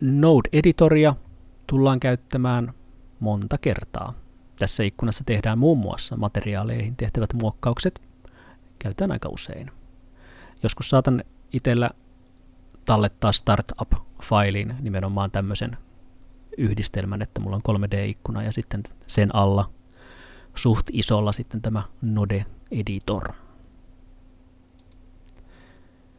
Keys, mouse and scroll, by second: 17.4 middle click, 24.8 click.